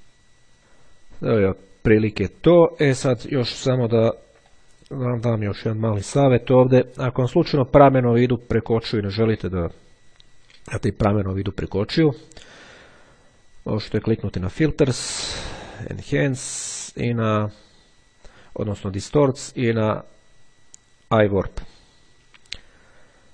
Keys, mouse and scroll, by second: 0.2 click, 4.5-5.7 drag, 14.0 click, 21.8 click.